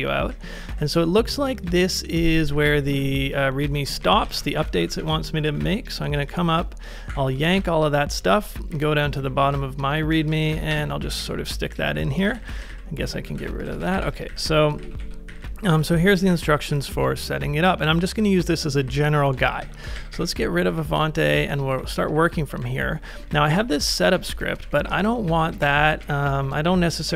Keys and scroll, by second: 0.3 k, 0.7 j, 1.7-5.1 typing, 6.3-15.3 typing, 17.9-22.6 typing, 25.2 ctrl+c, 25.4-27.1 typing.